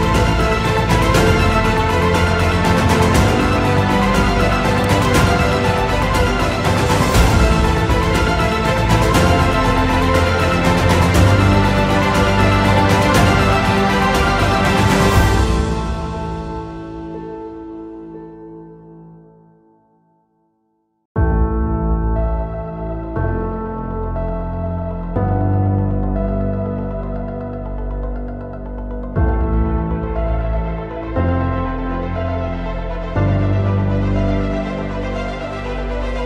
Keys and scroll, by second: 0.7 space, 1.6 F2, 6.8 Escape, 7.7 Delete, 9.1 y, 11.8 5, 12.0 Return, 13.0 space, 16.7 ctrl+z, 19.7 shift+F2, 20.5 F10, 22.9 F3, 27.6 F3, 28.1 space, 31.6 F3, 33.7 shift+F2.